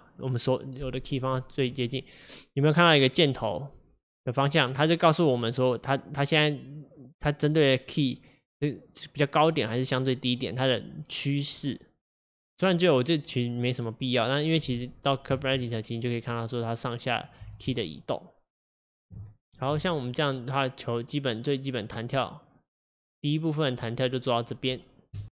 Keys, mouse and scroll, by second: 5.0-8.0 drag, 18.6-19.8 drag, 19.8 space, 25.2 space.